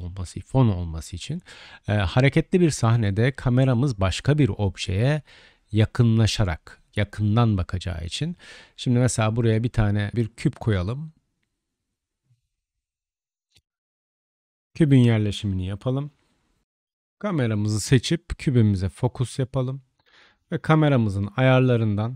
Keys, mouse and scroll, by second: 0.3 KP_0, 5.2 n, 8.3 middle click, 8.4 click, 8.9 middle click, 9.0-10.1 drag, 10.1 shift+a, 14.3-16.6 drag, 16.6 KP_0, 16.8 KP_Decimal.